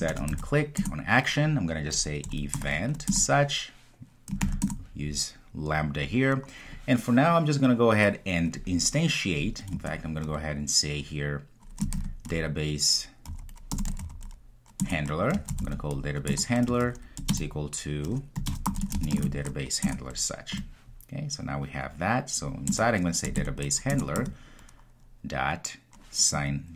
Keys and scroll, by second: 14.9 Return, 24.0 Return.